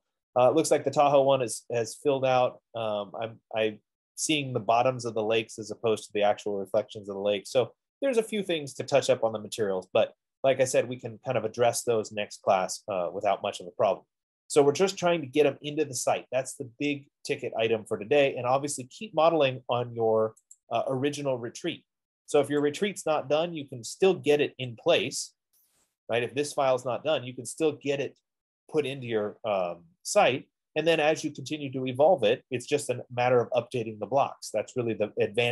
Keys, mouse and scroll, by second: 21.0-22.6 drag, 26.2 click, 27.5 F15, 30.3 middle click, 34.3-35.3 middle drag.